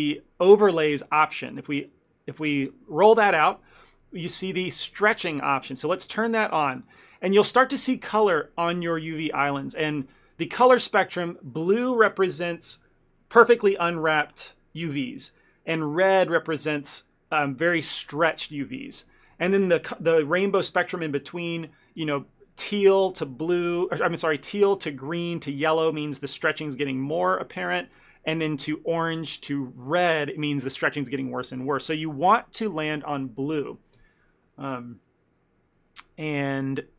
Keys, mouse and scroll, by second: 1.4 click, 5.8 click, 6.9 click.